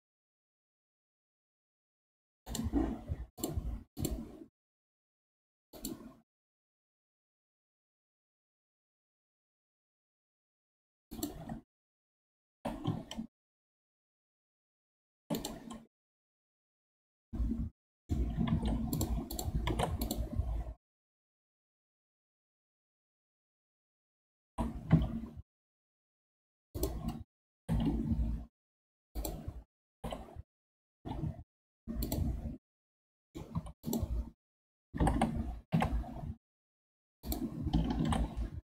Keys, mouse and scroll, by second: 3.4 click, 3.9-7.1 drag, 10.4 2, 11.1 alt+click, 12.4 g, 15.9 scroll down 3, 16.1-18.5 middle drag, 18.5 ctrl+Tab, 19.3 click, 19.7 ctrl+Tab, 22.5 a, 24.4 r, 27.5 g, 29.9 g, 32.7 middle click, 33.5 2, 33.8 click, 35.0 g, 38.0 ctrl+r.